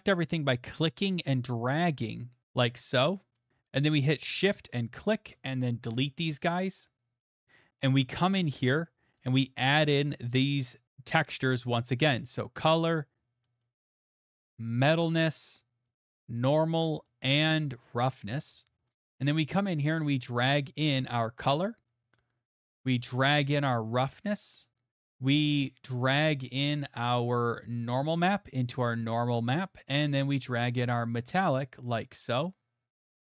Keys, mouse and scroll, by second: 3.3 right click, 4.7 shift+click, 5.8 Delete, 8.1 click, 9.2 click, 10.9 click, 14.9 click, 16.4 click, 17.9 click, 18.4 scroll, 18.9 click, 21.4 click, 22.1 click, 24.3 click, 25.9 click, 27.3 click, 29.0 click, 31.4 click, 33.1 click.